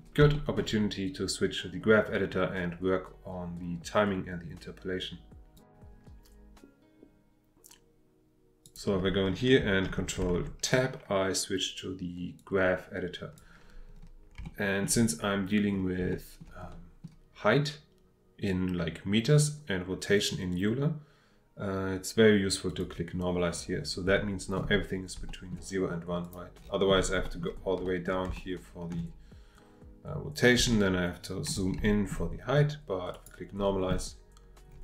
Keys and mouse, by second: 0.3 shift+click, 8.6 click, 12.6 click, 14.5 shift+middle click, 16.1-16.5 shift+middle drag, 16.7 click, 16.9 middle click, 22.7 click, 25.3 shift+middle click, 27.3 shift+middle click, 27.9 shift+middle click, 28.4 ctrl+middle click, 30.7 ctrl+middle click, 31.9 shift+middle click, 33.2 click.